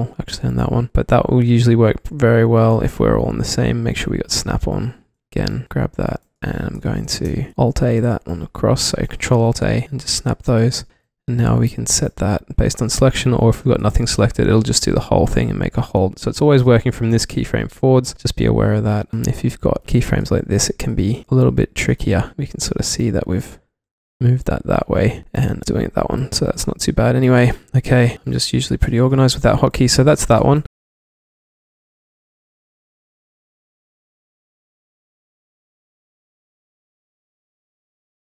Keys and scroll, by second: 0.9 alt+a, 5.5 v, 7.3 super+z, 7.7 ctrl+alt+a, 10.2 ctrl+alt+a, 10.9 v, 11.3 alt+a, 14.1 alt+a, 19.1 w, 20.3 q, 21.1 alt+a, 22.1-22.8 typing, 23.9 e, 25.2 alt+a, 25.4-26.1 typing, 27.2-29.4 typing.